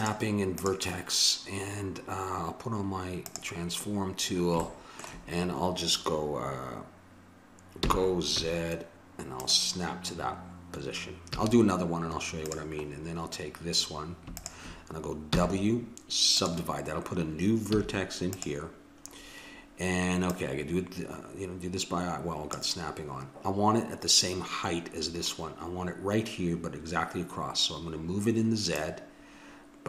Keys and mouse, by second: 5.0 click, 7.8 g, 11.3 a, 12.5-14.7 drag, 15.3 w, 15.4 click, 17.8 a, 18.3-19.9 drag, 20.4-21.9 drag, 28.7-29.8 drag.